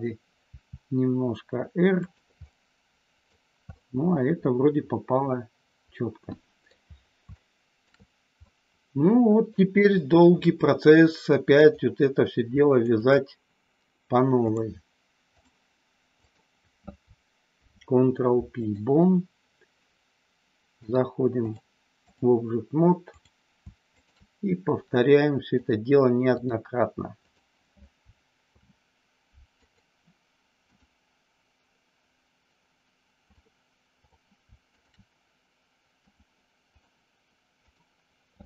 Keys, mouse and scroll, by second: 0.6 r, 2.0 click, 2.4 middle click, 3.7-6.7 middle drag, 7.3 shift+middle click, 8.3-9.4 middle drag, 12.8 shift+click, 14.4-15.6 drag, 17.6 ctrl+p, 20.8 click, 21.3 click, 23.0 click, 23.9 shift+click, 25.6 click, 27.0 click, 28.4 ctrl+p, 30.7-33.4 drag, 34.7 shift+click, 36.0 click, 37.6 click.